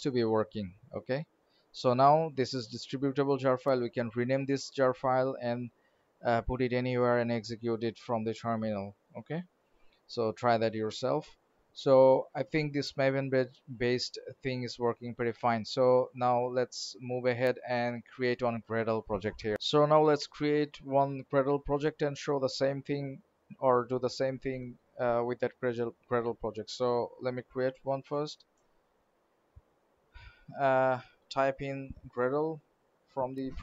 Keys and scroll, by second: 12.6 alt+Tab, 14.3 alt+Right, 27.5 alt+shift+n.